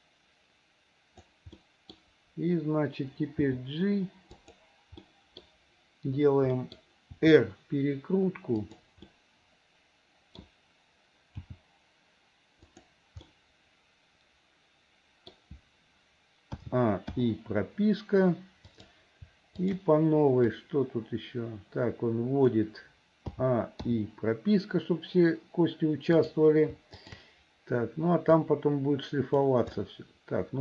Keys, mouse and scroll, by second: 1.6 middle click, 3.5 g, 5.1 middle click, 6.6 middle click, 7.2 r, 9.1-10.4 middle drag, 11.5 g, 13.3 scroll up 1, 13.4-15.4 middle drag, 16.6 a, 17.2 i, 18.7 click, 19.6 shift+click, 20.6-22.6 drag, 23.4 a, 23.9 i, 26.2 click, 28.5-29.6 drag, 29.8-30.6 middle drag.